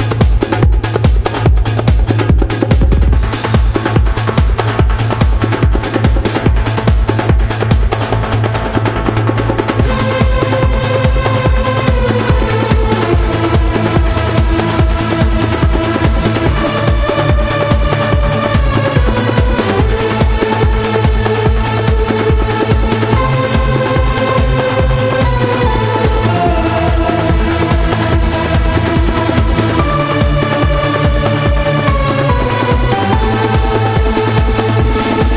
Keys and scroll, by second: 23.0 super+z.